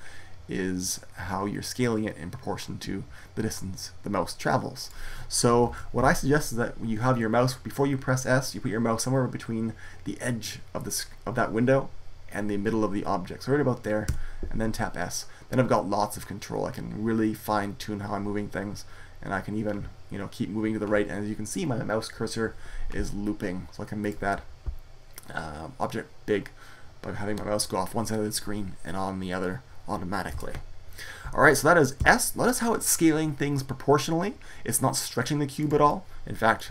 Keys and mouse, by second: 5.5 ctrl+z, 13.9 s, 23.9-25.8 middle drag, 30.2 super+z, 31.8 s, 35.9 middle click.